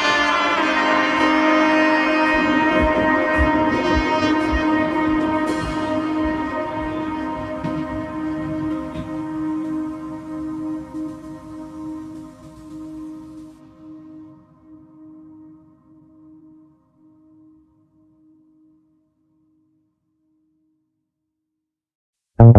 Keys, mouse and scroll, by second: 19.7-20.1 shift+middle drag, 20.1-20.9 scroll down 2, 20.9-22.2 shift+middle drag, 22.2 n.